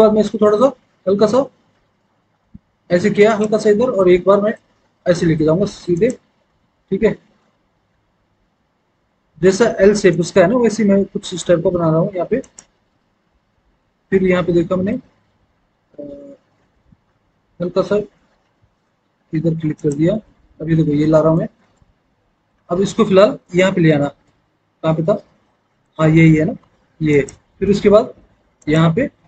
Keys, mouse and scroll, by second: 0.1-0.7 scroll down 1, 2.3-2.8 scroll up 1, 3.1 click.